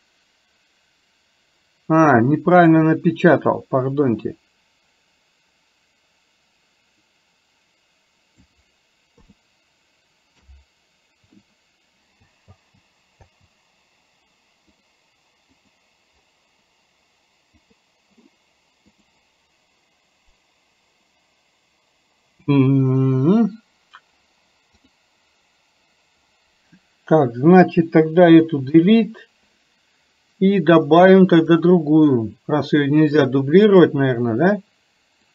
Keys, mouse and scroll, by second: 12.5 space, 14.3 space, 14.8 click, 17.6 click, 18.9-24.9 drag, 28.7 Delete, 31.5-34.0 drag.